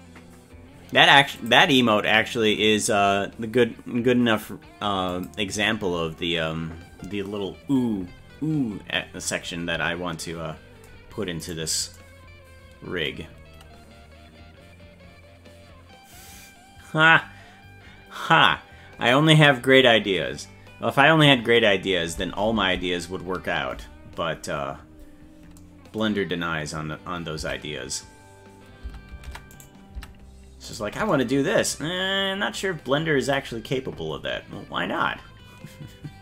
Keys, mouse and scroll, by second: 11.5 right click, 27.4 Tab, 29.0 Tab, 29.5 right click, 29.9 Tab, 30.7 right click.